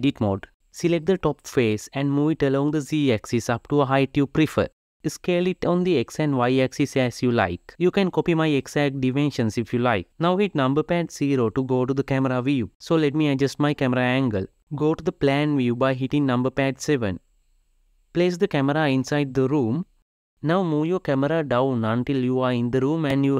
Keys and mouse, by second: 0.3 Tab, 0.8 3, 1.6 click, 2.4 g, 6.5 s, 10.1 n, 11.5 KP_0, 13.0 click, 13.6-14.7 drag, 15.3-17.2 drag, 17.2 KP_7, 17.9 g, 19.7 KP_0, 20.1 g.